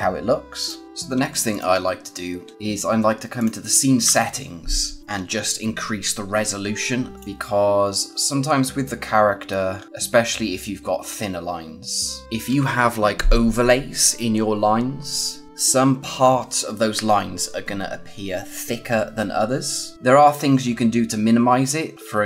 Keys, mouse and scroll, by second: 0.8 scroll up 1, 1.4 click, 3.3 click, 7.1 click, 7.6 scroll down 1, 8.0-8.7 scroll up 1, 9.2-9.7 scroll down 1, 9.7 scroll up 1, 12.2 scroll down 1, 18.8-19.2 scroll down 1, 19.9 scroll up 1, 20.6 scroll down 1, 21.0-21.9 scroll up 1, 21.9 click.